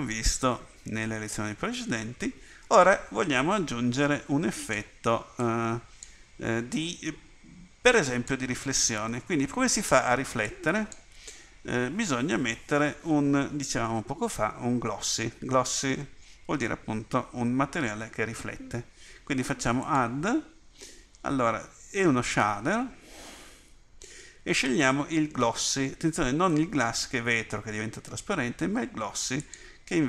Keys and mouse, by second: 3.9 click, 5.4 click, 8.8 click.